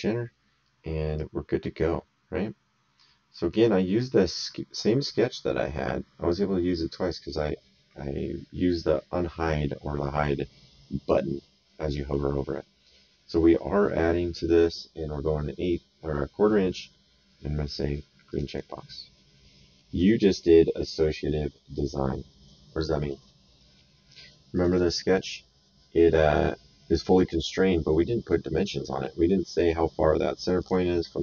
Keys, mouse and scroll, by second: 1.1 right click, 18.3 click, 19.5 middle click, 20.0 right click, 24.5 click, 30.6 click.